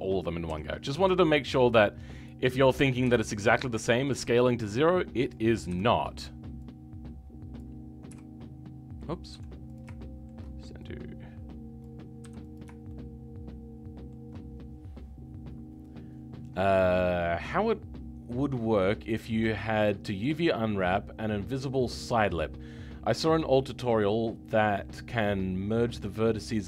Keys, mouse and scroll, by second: 0.4 KP_7, 2.2 click, 3.7-5.2 shift+middle drag, 5.2 click, 9.9-11.8 shift+middle drag, 11.8 click, 12.5 m, 12.8-26.6 shift+middle drag.